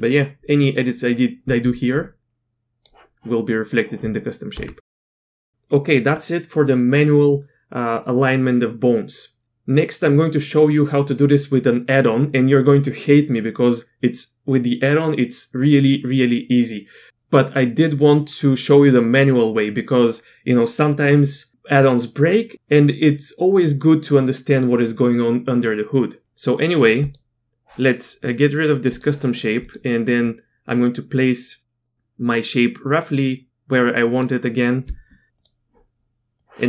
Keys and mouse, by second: 0.5-2.8 drag, 4.5 Tab, 27.1 click, 28.9 click, 29.7 click, 30.8-34.2 drag.